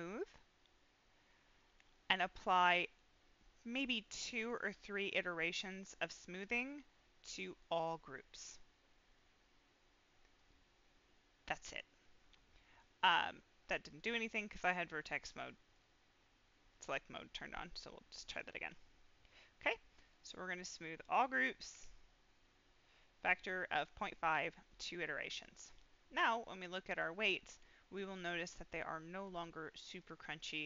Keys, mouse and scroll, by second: 2.0 click, 4.3 click, 6.3-7.7 drag, 10.3 click, 13.7 click, 15.7-18.4 drag, 20.0 click, 25.3 click, 26.2 middle click, 26.7-27.2 scroll up 2, 27.2 middle click, 28.9 middle click, 28.9 click, 29.9 click, 30.5 middle click.